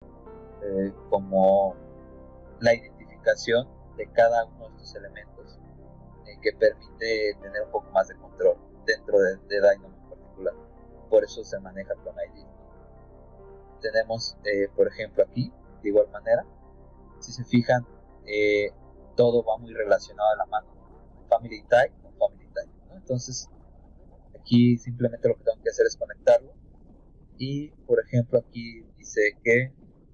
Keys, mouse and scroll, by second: 0.6 middle click, 1.4 click, 3.5-3.8 scroll down 4, 3.7 middle click, 6.7 middle click, 14.1 click, 15.5-16.6 drag, 16.8 middle click, 17.9-19.2 drag, 23.2 click, 23.8 click, 27.5 click.